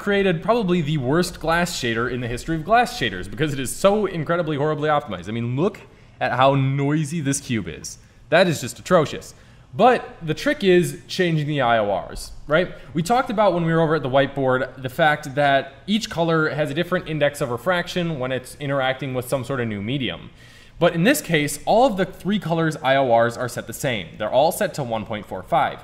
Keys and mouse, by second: 0.2-3.9 drag, 9.2-12.3 middle drag, 12.3-14.5 drag, 14.5-17.4 middle drag.